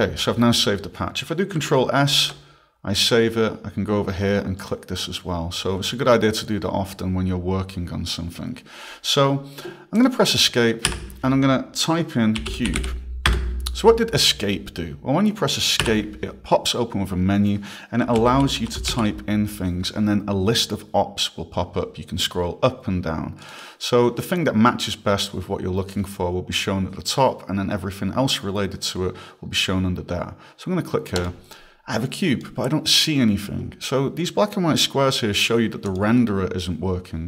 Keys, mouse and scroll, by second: 2.1 ctrl+shift+s, 4.6 click, 10.0 click, 10.9 Escape, 12.2-13.9 typing, 15.9 Escape, 17.8-19.4 typing, 21.8 scroll, 23.4 click, 23.5 click, 28.3 scroll, 29.4 scroll, 31.2 click, 32.0 click, 35.9 click.